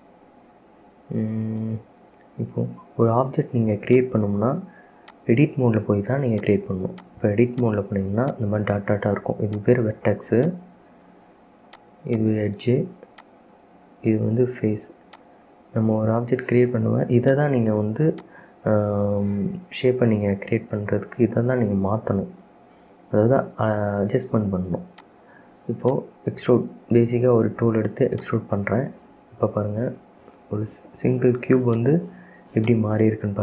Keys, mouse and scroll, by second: 0.3-1.5 scroll up 5, 1.5-1.9 scroll down 2, 1.9-4.1 middle drag, 4.1-6.6 drag, 7.1 click, 7.6 click, 8.4 click, 9.7 click, 10.6 click, 11.9 click, 12.2 click, 13.3 click, 15.2-17.4 drag, 18.4 click, 23.4 e, 25.9 click, 26.6 e, 30.9 e, 32.8 click, 33.2 e.